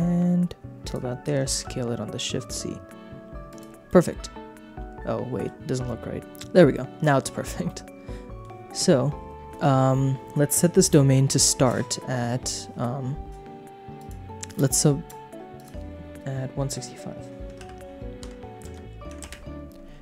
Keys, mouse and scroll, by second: 0.8 shift+click, 1.3 s, 1.5 shift+z, 3.5 shift+click, 3.8-5.4 middle drag, 6.2 g, 6.3 shift+click, 6.7 click, 7.6 middle click, 13.9 click, 15.5-19.3 drag.